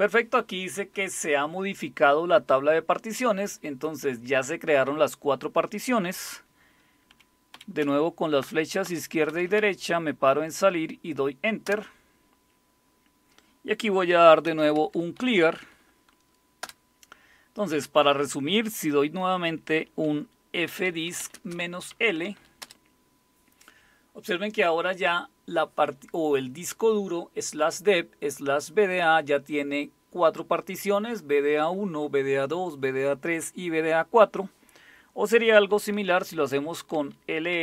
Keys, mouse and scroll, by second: 7.1 Left, 7.5 Left, 7.8 Left, 8.4 Left, 9.3 Right, 9.5 Right, 11.6 Return, 14.2-15.7 typing, 16.6 Return, 20.0-22.4 typing, 22.6 Return, 35.7-37.6 typing.